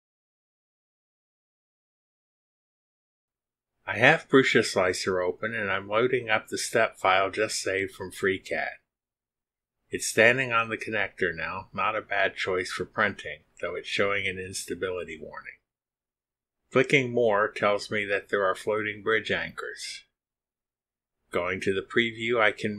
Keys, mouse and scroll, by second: 1.1 click, 5.1 click, 7.1 click, 12.0 middle click, 16.6 click, 21.9 click.